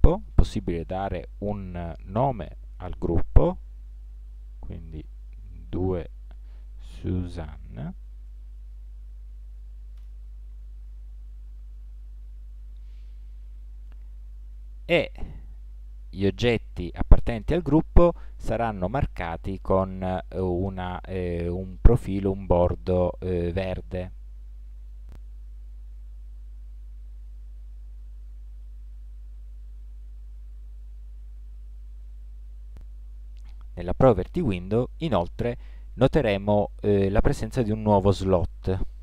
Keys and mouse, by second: 0.2-1.7 drag, 8.3 n, 15.1-20.7 middle drag, 23.9-24.9 middle drag, 25.9 right click.